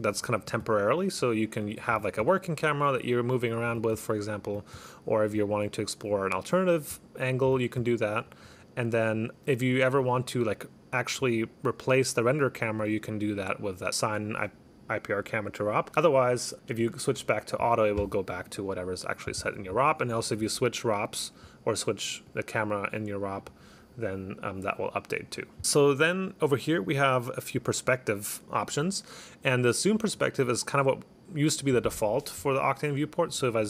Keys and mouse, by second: 0.2 click, 0.9 click, 1.4 click, 1.8 click, 3.5 right click, 7.0 click, 8.1 right click, 9.2 click, 9.7 click, 10.0 click, 15.9 click, 16.2 click, 17.2 click, 22.4 click, 23.5 click, 30.0 click.